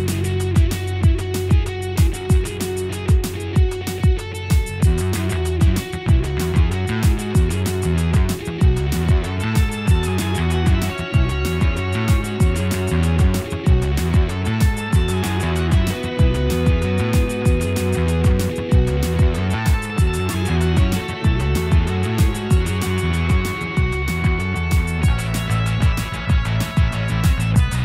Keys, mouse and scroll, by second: 0.0 scroll down 2, 0.2 middle click, 1.0-1.6 scroll up 2, 1.6 click, 2.5 shift+click, 3.0 g, 5.5 click, 5.8 g, 8.8 scroll down 4, 9.1 Tab, 9.3-10.3 middle drag, 10.3-10.9 scroll down 2, 10.9 Tab, 11.0-11.6 scroll up 4, 11.6 click, 11.8 l, 13.0 o, 13.2 scroll down 2, 13.5 Tab, 13.9 alt+middle click, 14.3 scroll down 2, 14.5 alt+middle click, 14.9-15.4 scroll down 2, 15.4 shift+middle drag, 15.6-16.1 scroll up 5, 16.1 g, 16.6-17.0 scroll down 4, 17.0 shift+middle drag, 17.3 Tab, 17.8 click, 18.1 l, 18.8 shift+middle drag, 19.1-20.0 scroll up 2, 20.0 p, 20.3 Tab, 20.4 click, 20.6 g, 21.4-22.0 shift+middle drag, 22.0 click, 22.1 g, 22.6 Tab, 23.0 click, 23.5 l, 24.7 p, 25.1 click, 25.5 l, 25.8 p, 26.4 click, 26.9 l, 27.1 p, 27.6 click.